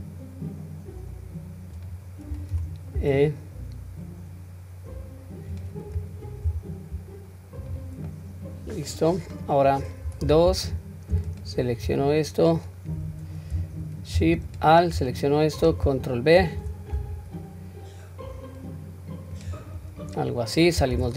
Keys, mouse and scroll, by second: 8.1-8.9 middle drag, 9.1 scroll up 1, 10.0-11.2 scroll up 1, 11.3 alt+click, 12.0-12.5 middle drag, 14.5 alt+shift+click, 15.1-15.6 middle drag, 16.4 ctrl+b, 19.8-20.2 scroll down 1, 20.2-20.7 middle drag, 21.0 Tab.